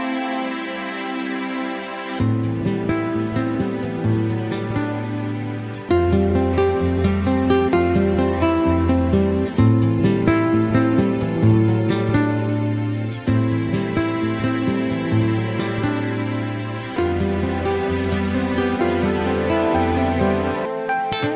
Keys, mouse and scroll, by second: 0.3 click, 3.2 click, 15.5 click.